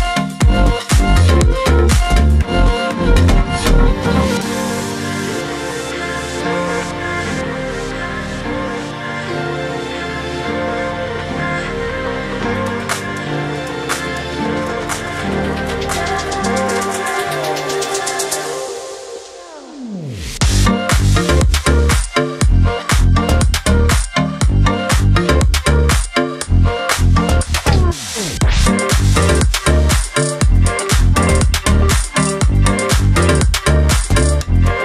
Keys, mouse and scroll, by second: 6.5 alt+scroll down 1, 7.4-7.7 scroll down 1, 8.0-8.6 scroll up 1, 9.0 alt+scroll up 1, 9.9-11.1 scroll up 1, 11.1-11.8 drag, 15.3 v, 15.9-17.1 drag, 19.6-20.5 shift+drag, 26.9 right click, 27.7-34.8 drag.